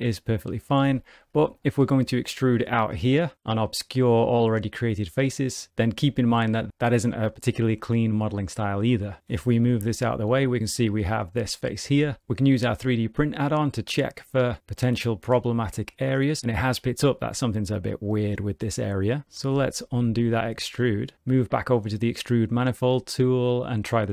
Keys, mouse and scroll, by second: 0.8 ctrl+z, 1.2 click, 1.6 shift+middle click, 1.9 middle click, 2.5 e, 5.7 middle click, 6.0 shift+middle click, 6.5 middle click, 9.6 g, 11.9 ctrl+z, 13.6 click, 16.7 click, 18.0 middle click, 19.6 ctrl+z, 19.7 ctrl+z, 20.5 ctrl+shift+z, 22.2 click, 23.3 middle click.